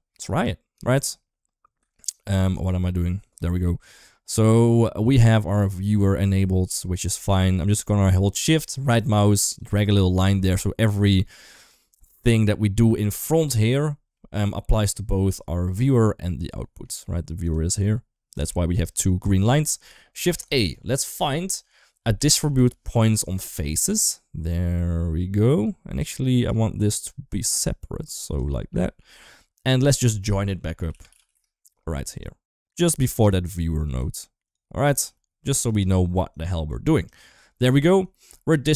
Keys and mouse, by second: 0.1 ctrl+z, 2.4 ctrl+z, 4.2-5.2 middle drag, 6.3 middle click, 8.9 shift+right click, 10.1 g, 14.1-16.7 middle drag, 17.5 g, 18.4 shift+middle click, 19.4 shift+middle click, 20.1 shift+a, 26.4 shift+middle click, 27.4-28.2 drag, 28.6 shift+middle click, 29.6 shift+a, 32.5 g, 33.6 click, 33.8 g, 34.8 g, 36.1 click, 36.4-37.3 drag.